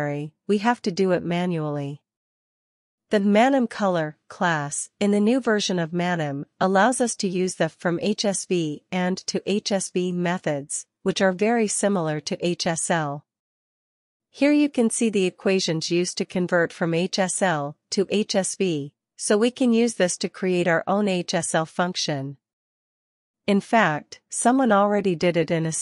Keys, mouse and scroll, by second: 0.8-1.8 drag, 1.1-2.5 scroll down 1, 2.5-3.9 scroll down 1, 3.9-5.7 drag, 5.9 click, 8.1-10.0 drag, 12.7 click, 13.6 click, 23.4 click, 24.3-25.1 scroll down 2, 25.1-25.8 scroll up 2.